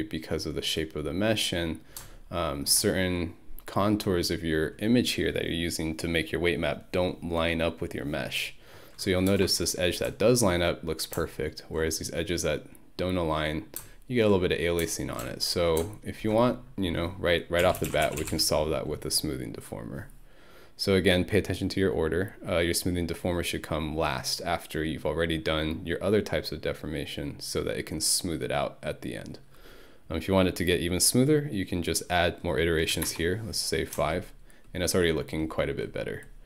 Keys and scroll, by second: 17.4-18.8 typing, 32.9 5, 33.1 Return.